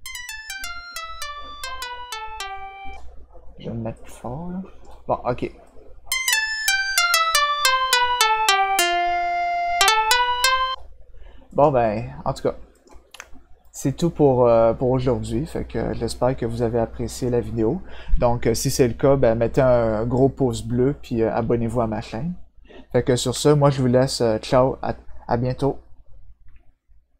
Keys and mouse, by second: 3.9 click, 5.6-10.6 drag, 11.5 click, 12.7 click, 13.6 click.